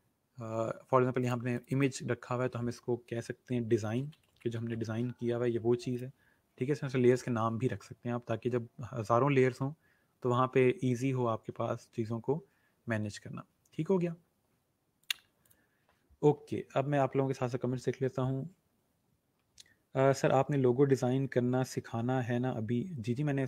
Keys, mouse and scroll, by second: 3.7-5.4 typing, 5.9 click, 15.0 click.